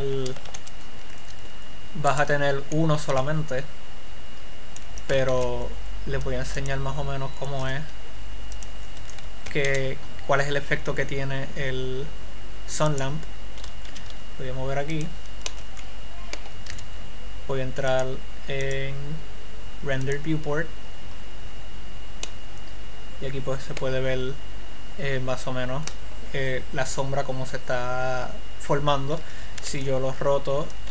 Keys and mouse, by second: 0.9 KP_5, 4.3 middle click, 5.7 shift+a, 8.1 s, 10.1 shift+a, 14.4 g, 15.6-17.3 drag, 17.1 z, 30.3 r.